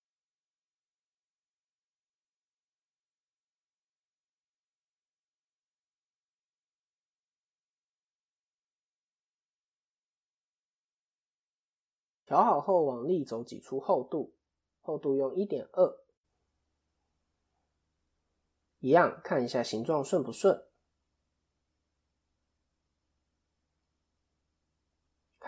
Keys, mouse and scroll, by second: 0.1 g, 4.7 click, 5.8 shift+click, 7.3 click, 9.2 click, 10.0 KP_1, 11.1 a, 12.0 e, 14.5 click, 17.9 ctrl+KP_3, 20.4 click, 23.3 KP_7, 23.8 KP_3, 24.7 KP_7.